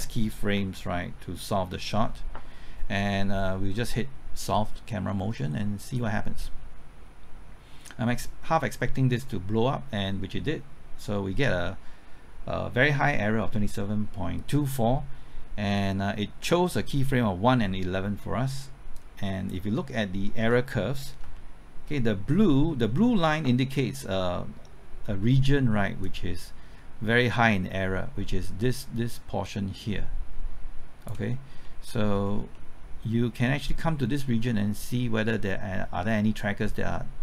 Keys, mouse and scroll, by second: 0.7 ctrl+middle click, 5.9 click, 19.8 middle click, 21.3-22.9 ctrl+middle drag, 26.0-31.6 drag, 31.6 middle click, 32.0-32.5 scroll up 1, 32.5 middle click, 33.7-37.2 drag.